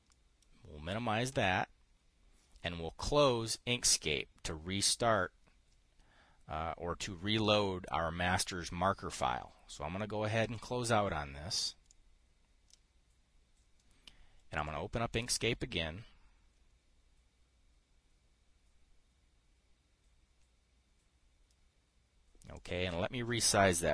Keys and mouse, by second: 0.6 click, 1.8 click, 11.0 click, 12.3 click, 23.0 click.